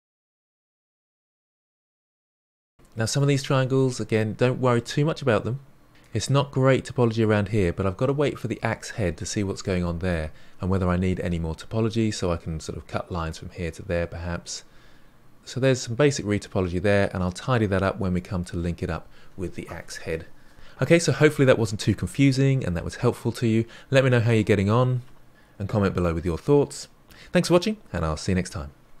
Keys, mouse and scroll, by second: 0.0-0.2 typing, 0.4 middle drag, 0.6 scroll down 1, 0.7-5.2 shift+middle drag, 9.6-12.6 middle drag, 13.2-17.5 middle drag, 17.8-18.1 scroll down 1, 18.1-19.6 middle drag, 20.4-23.4 middle drag, 26.6-29.0 middle drag.